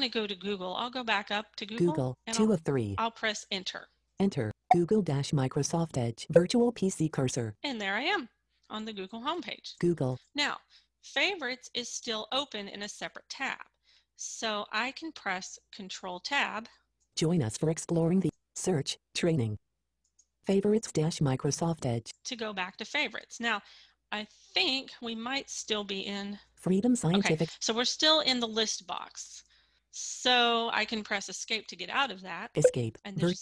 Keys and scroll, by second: 3.0 Return, 15.1 ctrl+Tab, 30.7 Escape.